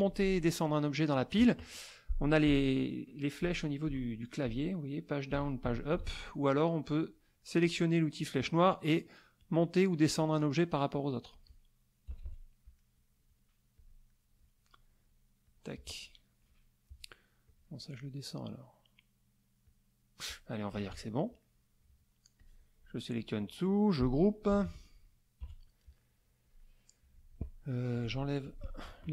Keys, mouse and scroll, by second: 2.5 Page_Up, 3.4 Page_Down, 3.8 Page_Up, 5.3 Page_Up, 5.6 Page_Down, 5.9 Page_Up, 7.6 click, 9.4 click, 10.2 click, 11.2 click, 12.1 KP_Subtract, 12.8 click, 13.7 click, 14.2 middle click, 15.4 click, 16.1 middle click, 17.4 click, 19.6 click, 20.7 KP_Subtract, 21.4 middle click, 22.4-23.9 drag, 24.5 ctrl+g, 25.4 KP_Subtract, 26.0 click, 26.6 click, 26.6 middle click, 28.0 shift+click, 28.4 shift+click.